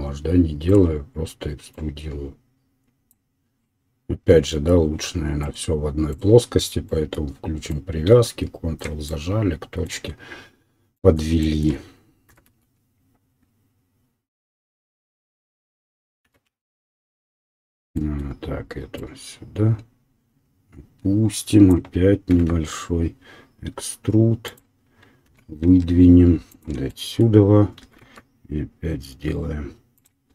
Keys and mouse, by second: 0.7-1.8 drag, 9.1-11.4 middle drag, 12.4 e, 14.8 click, 15.6-18.9 middle drag, 16.3 e, 18.9-24.5 drag, 22.3 e, 24.5-30.3 middle drag, 25.4 e.